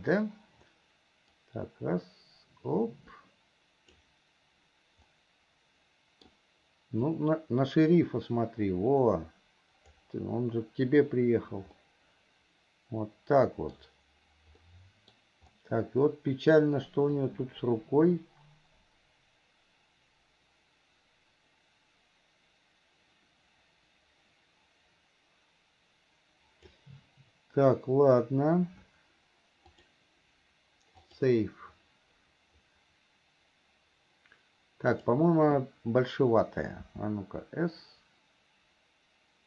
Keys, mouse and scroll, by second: 1.8-4.4 drag, 5.3-6.6 middle drag, 7.5-10.4 drag, 12.1-14.2 middle drag, 15.0 middle click, 17.5-27.3 drag, 30.0-32.5 drag, 35.1 click, 37.1 s.